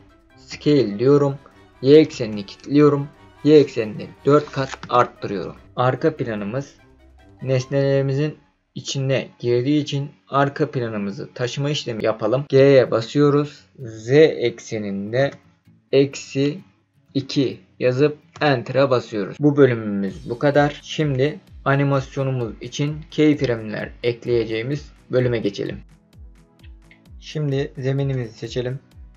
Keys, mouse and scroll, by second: 0.4 s, 2.1 y, 4.0 KP_4, 4.8 KP_Enter, 12.5 g, 15.2 z, 16.4 KP_Subtract, 17.0 KP_2, 18.3 KP_Enter, 28.1 click.